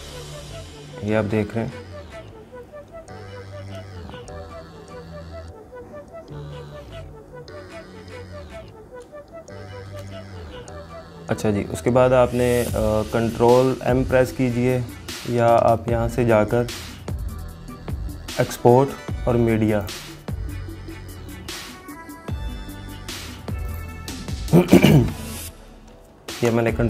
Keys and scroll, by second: 26.5 ctrl+m.